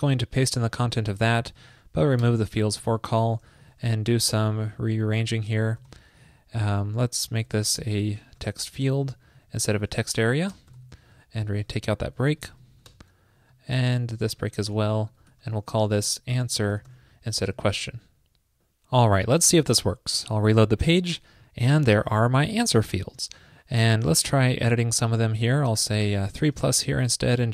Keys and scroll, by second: 1.7 shift+super+Right, 3.0 alt+Left, 3.2 alt+Left, 5.8 alt+shift+Left, 7.6 alt+Left, 7.6 alt+Left, 7.8 alt+Left, 8.4 shift+Left, 11.2 alt+Right, 12.7 shift+super+Right, 13.7 alt+Right, 13.8 alt+Right, 14.5 shift+super+Right, 15.2 alt+Left, 18.1 super+s.